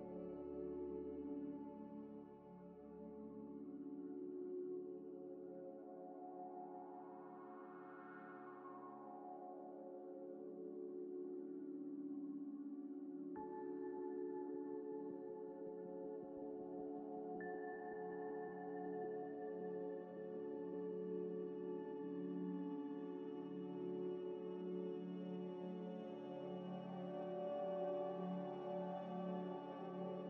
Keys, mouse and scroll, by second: 0.1 scroll down 1, 0.6 g, 0.6 x, 1.7 Tab, 2.1 1, 2.3 2, 2.6 2, 3.4 alt+click, 3.9 alt+click, 4.0 ctrl+b, 4.8 Tab, 5.3-6.9 typing, 5.8 Tab, 8.3 shift+click, 9.0 ctrl+-, 10.3 g, 10.3 x, 11.6-13.3 typing, 11.7 shift+click, 16.1 shift+click, 17.0 ctrl+-, 17.9 g, 17.9 x, 20.9 s, 21.9 ctrl+z, 22.8 s, 23.4 g, 23.5 x, 25.6 z, 26.2 z, 26.7 z, 27.1 shift+click, 27.9 m, 29.1-30.1 typing, 30.0 Return, 30.1 Return.